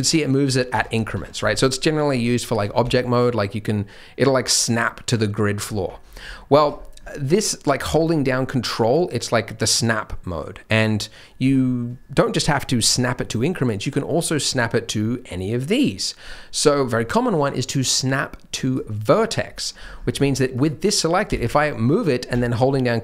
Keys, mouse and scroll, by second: 0.8-2.4 scroll down 11, 1.1 Tab, 2.4 g, 6.0-9.5 scroll up 14, 6.5 Tab, 13.6 click, 19.5-19.9 scroll down 3, 19.7-21.2 scroll up 9, 20.5 click, 21.2 g.